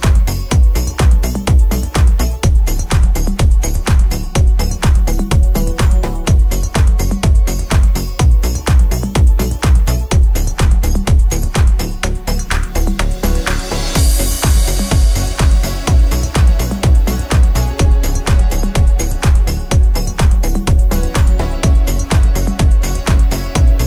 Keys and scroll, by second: 2.1 z.